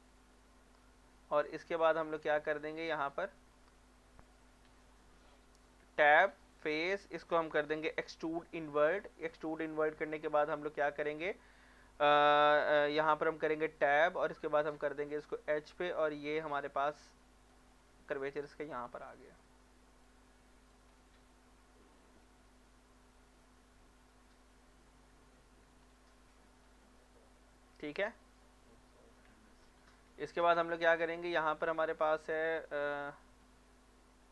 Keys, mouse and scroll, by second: 0.1 click, 2.4 click, 3.4 middle click, 5.3 scroll down 1, 5.5 middle click, 5.8 Tab, 6.6 click, 6.9 middle click, 7.9 e, 8.8 click, 9.1 middle click, 10.1 scroll up 1, 10.6-13.5 middle drag, 13.6 Tab, 15.0-17.7 drag, 17.7 middle click, 18.7 click, 19.1 middle click, 20.0 click, 20.9 scroll down 1, 21.1 middle click, 21.7 middle click, 21.9-22.2 scroll down 3, 25.1 Tab, 25.8 scroll down 1, 26.0 middle click, 26.6 scroll down 1, 26.8 middle click, 28.1 scroll up 1, 28.4 middle click, 28.7 scroll up 1, 29.0 middle click, 29.2 Tab, 30.4 middle click, 30.7-31.3 scroll up 1, 32.8 middle click, 33.2 shift+middle click, 33.5 scroll up 1.